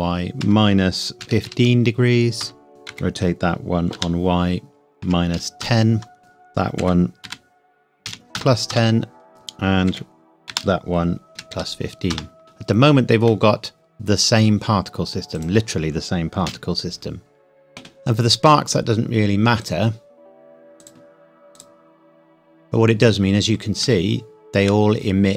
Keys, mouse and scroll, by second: 0.4 KP_Subtract, 1.2 KP_1, 1.5 KP_5, 2.4 KP_Enter, 2.7 click, 2.9 r, 4.0 y, 5.0 KP_Subtract, 5.4 KP_1, 5.6 KP_0, 6.2 click, 6.8 r, 7.2 y, 8.1 KP_1, 8.4 KP_0, 8.7 KP_Enter, 9.3 click, 9.9 r, 10.5 y, 11.3 KP_1, 11.5 KP_5, 12.1 KP_Enter, 13.4 middle click, 15.4 click, 16.5 KP_1, 17.3 scroll down 1, 19.6 click, 22.4 scroll down 1, 24.2 shift+middle click, 25.0-25.3 scroll down 1.